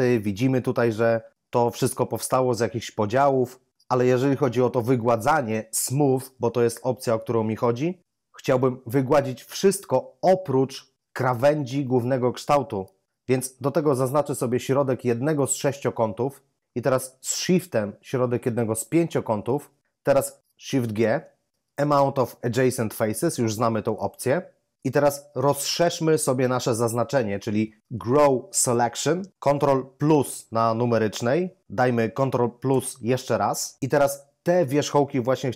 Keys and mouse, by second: 15.2 right click, 18.8 shift+right click, 20.9 shift+g, 23.9 click, 30.0 ctrl++, 32.6 +.